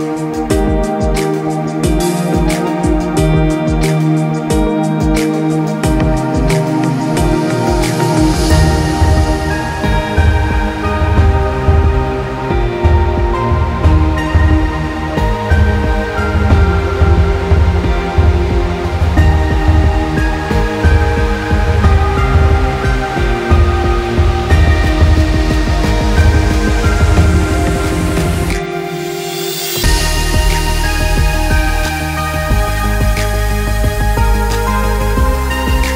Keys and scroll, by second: 13.5 ctrl+g, 13.9 ctrl+t, 14.6 shift+Right.